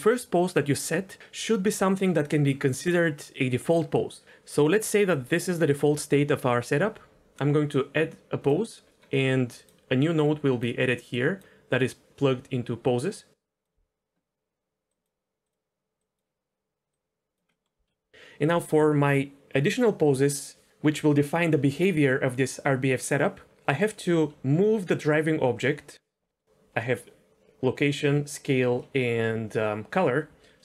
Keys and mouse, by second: 9.2 middle click, 9.5 click, 10.0-10.6 drag, 11.1 click, 13.3-13.6 drag, 14.9 click, 15.4 click, 16.1 click, 16.9 click, 17.5 middle click, 17.8 KP_1, 24.0 g, 26.3 middle click, 28.8 middle click.